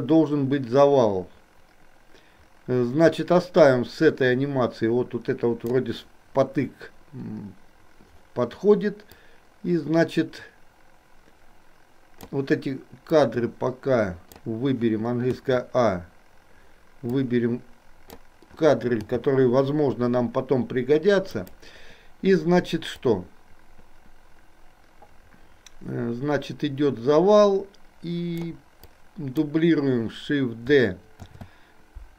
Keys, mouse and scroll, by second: 9.3-12.5 drag, 13.2-14.5 drag, 15.5 a, 17.3 click, 19.0 g, 23.1-28.6 drag, 29.0-29.5 drag, 31.5 shift+d.